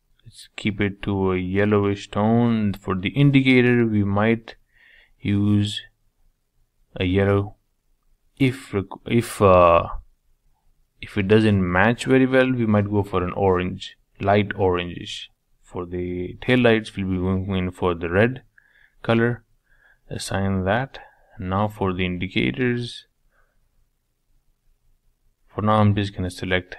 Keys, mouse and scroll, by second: 2.7-3.3 drag, 3.3-4.5 middle drag, 4.5 click, 6.7-8.3 drag, 8.3-8.8 typing, 9.7-12.2 drag, 14.2-16.1 drag, 18.3 click, 18.8-21.3 middle drag, 21.3 click, 21.7 middle click, 22.1 scroll up 2, 22.5-24.5 shift+middle drag, 24.5 shift+click, 25.3-26.4 middle drag, 26.4 shift+click.